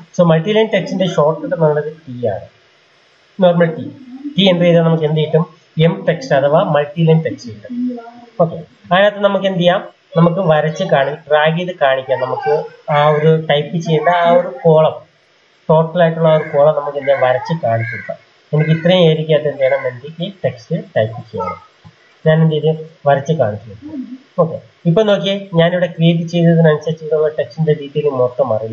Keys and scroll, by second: 1.8 t.